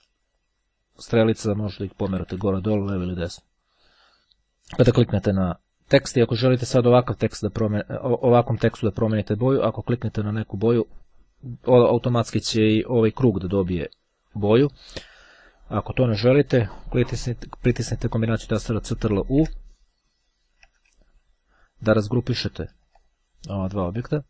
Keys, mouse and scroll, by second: 2.3 Down, 4.7 click, 7.8-8.9 drag, 10.5 click, 13.2 Right, 19.2 ctrl+u, 21.2-21.8 ctrl+scroll down 2, 21.8 ctrl+scroll down 1, 21.9-22.5 ctrl+scroll up 2, 22.5-22.9 ctrl+scroll up 1.